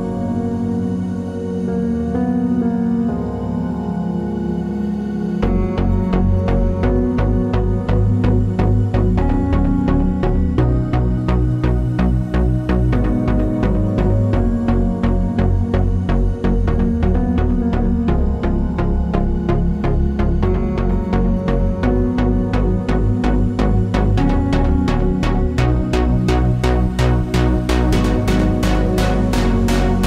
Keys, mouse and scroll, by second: 6.3 click, 6.4 g, 8.3 click, 8.4 g, 11.3 click, 12.3 z, 14.5-30.0 drag, 15.3 KP_Enter, 29.5 scroll down 1.